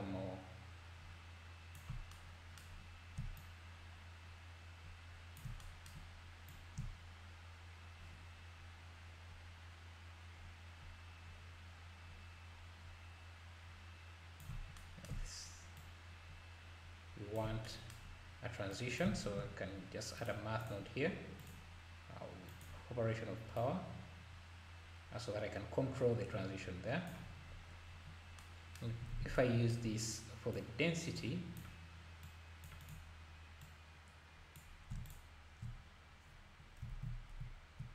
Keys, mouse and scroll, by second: 3.4-5.6 shift+drag, 6.5-9.5 shift+drag, 15.8-17.7 shift+drag, 18.7-19.2 drag, 19.2 shift+a, 21.4-26.6 drag, 27.4-28.4 scroll down 9, 29.1 ctrl+s, 30.5 click, 30.5 scroll down 9, 32.3-35.2 drag, 36.9 ctrl+s.